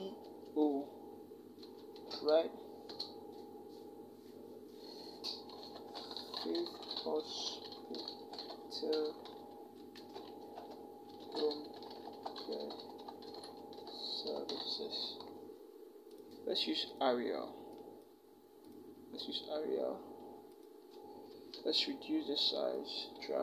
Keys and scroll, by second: 0.0 o, 1.4 space, 1.7 -, 2.7 space, 5.4-8.7 typing, 9.8-13.0 typing, 14.1 s, 14.3 e, 21.1 ctrl+t.